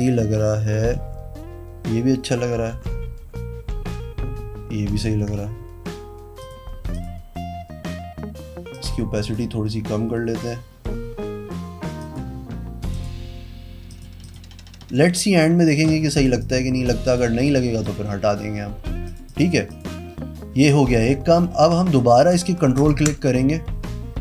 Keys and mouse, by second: 0.0-0.9 typing, 2.5-3.7 typing, 6.3 click, 6.9 click, 8.7 click, 9.2 click, 10.3 click, 11.9 click, 12.8 click, 14.2 click, 16.1 click, 16.3 click, 17.0 click, 17.4 click, 17.8 click, 19.0 click, 19.2 click, 19.6 click, 22.7 ctrl+click.